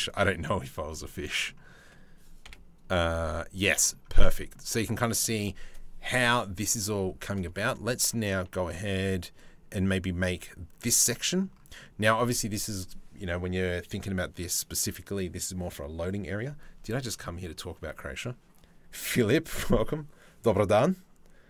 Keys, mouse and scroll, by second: 0.7 middle click, 2.1 KP_7, 3.2 middle click, 4.0 middle click, 4.7 middle click, 10.4 middle click, 11.5 middle click.